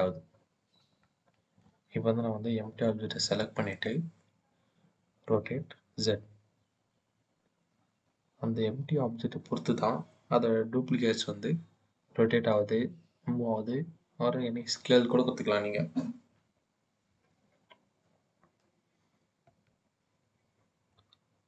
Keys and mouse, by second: 1.5-2.1 middle drag, 3.1 click, 3.5 click, 5.3 r, 5.8 z, 19.2 KP_1, 20.6-21.4 middle drag.